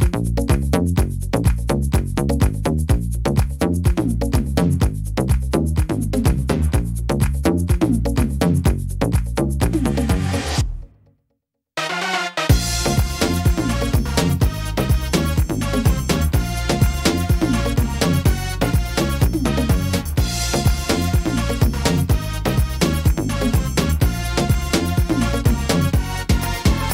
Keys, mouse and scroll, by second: 0.5 middle click, 1.4 middle click, 2.3-3.3 scroll down 2, 2.7 middle click, 4.2 scroll up 4, 4.7 middle click, 5.2 shift+middle click, 5.9 middle click, 6.7 right click, 8.5 click, 9.3 right click, 9.7 shift+right click, 10.2 right click, 11.0 ctrl+r, 12.0 ctrl+r, 13.4 right click, 14.8 click, 15.7 shift+right click, 16.1 shift+right click, 16.5 shift+right click, 16.8 shift+right click, 17.2 shift+right click, 17.8 shift+right click, 17.9 shift+right click, 18.3 shift+right click, 18.7 shift+right click, 19.1 shift+right click, 19.4 shift+right click, 19.9 shift+right click, 20.7 shift+d, 21.5 middle click, 22.7 click, 26.2 e.